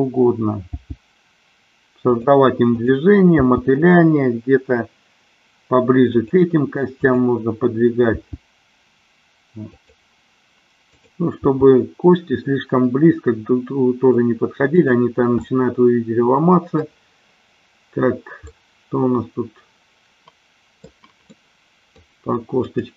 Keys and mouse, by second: 0.9 g, 2.9-4.4 drag, 4.6 g, 6.4 click, 7.1 click, 8.6 g, 10.9-12.1 drag, 12.4 g, 15.5-17.0 middle drag, 18.5-21.0 middle drag, 21.4 middle click, 22.7-22.9 drag.